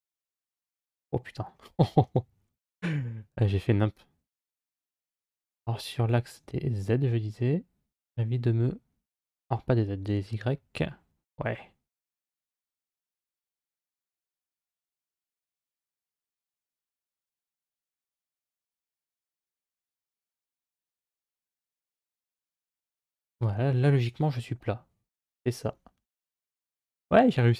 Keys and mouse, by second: 0.5 middle click, 1.9 ctrl+z, 4.8 g, 17.6-19.2 drag, 20.2 g, 23.2 middle click, 24.2 KP_3.